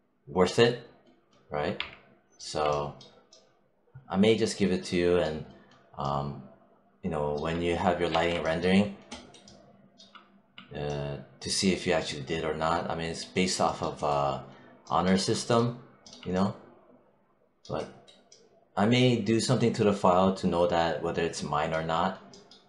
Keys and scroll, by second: 1.6 3, 7.9 1.